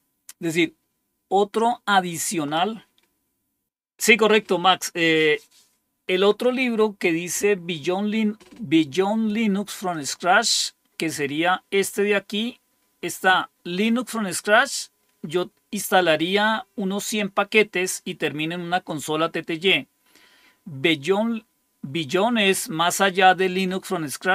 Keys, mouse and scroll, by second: 9.8 click.